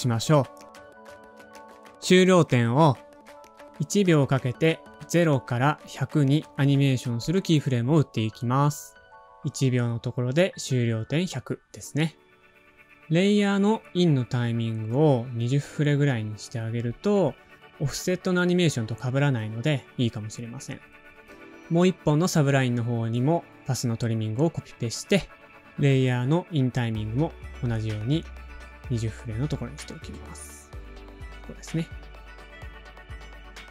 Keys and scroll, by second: 7.8 shift+Page_Down, 11.9 shift+super+h, 12.7 shift+Page_Up, 13.2-15.6 typing, 18.6 super+c, 20.3 i, 20.7 super+Down, 20.9 super+v, 21.5 alt+[, 23.0 space, 23.4 super+z, 24.3 space, 25.4 BackSpace, 27.4 super+c, 28.1 super+v, 29.4 alt+[, 30.9 space, 30.9 o.